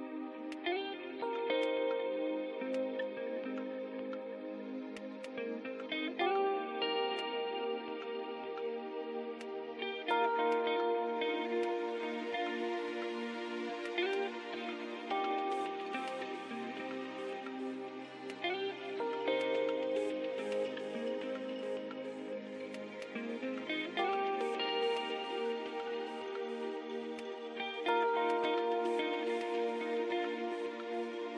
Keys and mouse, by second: 1.2 e, 1.9-3.4 drag, 3.4 ctrl+Tab, 5.6-6.9 drag, 8.7-10.2 right drag, 11.4-13.3 drag, 13.3 middle click, 13.8-15.9 shift+right drag, 17.0 right click, 17.3 middle click, 17.8 e, 22.2 s, 27.7 Tab.